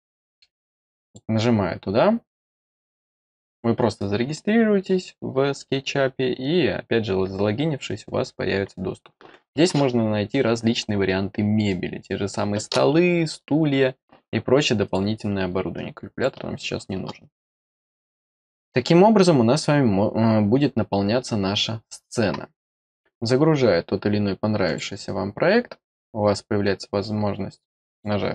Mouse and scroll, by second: 1.0 click, 2.9-3.4 drag, 10.5 scroll up 2, 10.8 scroll down 1, 11.6 click, 14.8 click, 15.7 click, 22.8 scroll up 1, 23.8 scroll down 1, 24.6 click, 27.8 click.